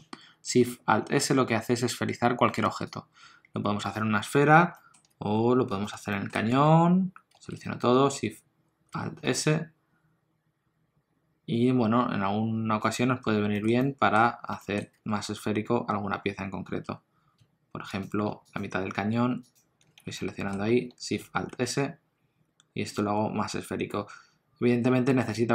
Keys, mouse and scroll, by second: 1.9 Tab, 2.6 x, 4.4 scroll down 2, 4.8 shift+middle click, 5.8 click, 6.1 shift+middle click, 6.6 Tab, 7.3 a, 9.3 alt+shift+s, 13.6 shift+middle click, 13.8 middle click, 14.6 shift+middle click, 15.0 3, 17.9 alt+click, 18.5 alt+shift+click, 20.1 middle click, 21.5 alt+shift+s.